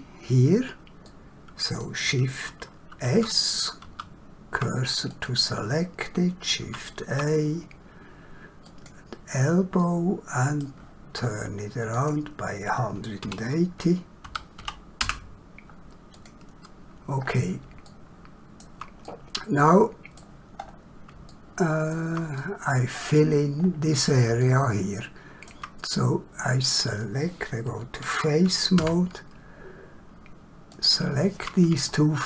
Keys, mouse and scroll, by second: 1.0 middle click, 3.1 shift+s, 5.1 click, 6.7 shift+a, 8.8 click, 9.8 middle click, 11.9 click, 13.3 1, 14.2 8, 14.5 0, 15.1 Return, 16.2 click, 17.3 scroll down 1, 17.9 shift+middle click, 19.1 middle click, 20.7 scroll up 1, 21.3 shift+middle click, 22.4 middle click, 23.7 scroll up 1, 24.5 shift+middle click, 25.9 middle click, 28.8 3, 30.7 click.